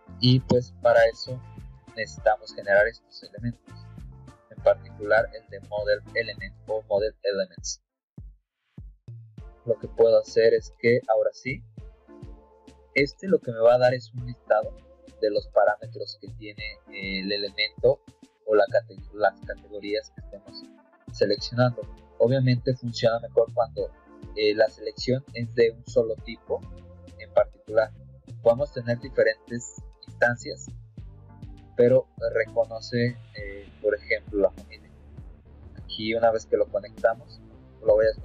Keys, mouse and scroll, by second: 0.4 alt+Tab, 3.8 middle click, 4.2 middle click, 6.4 click, 10.1 scroll up 2, 12.4-13.5 drag, 14.0 click, 14.9 click, 22.6 click, 32.3 click, 33.4 click, 34.5 click, 37.5 click, 38.1 click.